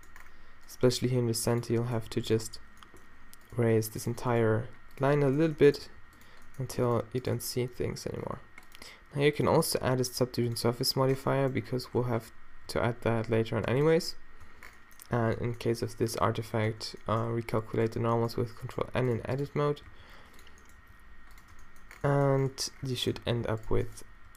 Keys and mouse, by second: 0.7 click, 0.9 g, 1.6-3.0 middle drag, 3.6 click, 3.6 g, 4.6 g, 5.9 g, 6.5 click, 7.1 g, 7.6-11.2 drag, 7.6-8.7 middle drag, 7.6-8.7 right drag, 7.8 g, 11.2 Tab, 11.3 click, 12.2 z, 12.7 z, 12.9 t, 13.1-14.6 drag, 14.5 Tab, 15.2 a, 15.7 a, 16.4 ctrl+n, 16.7 Tab, 17.6 Tab, 19.5 g, 20.8 g, 21.5 Tab, 23.2 Tab, 23.6 click, 24.1 g.